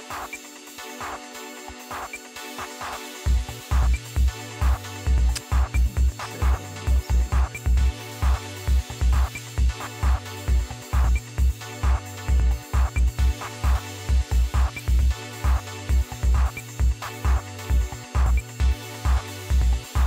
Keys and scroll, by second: 16.6 Left, 16.9 Left, 18.7 3, 19.5 0.